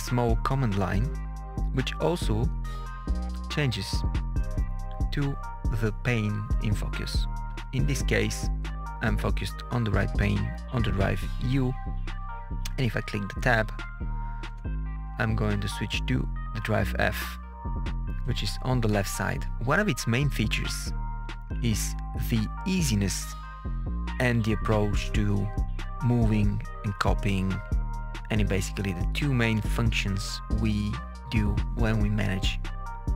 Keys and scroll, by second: 14.4 Tab.